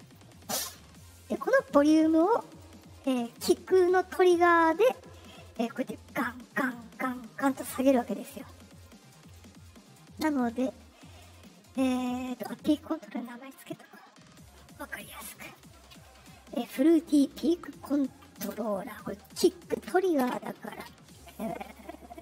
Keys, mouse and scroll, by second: 0.0 click, 2.5-3.3 drag, 5.4-7.6 drag, 8.7 right click, 9.1 click, 11.4 click, 14.1 middle click, 15.3 click, 17.8 Right, 18.4 space, 21.2 BackSpace.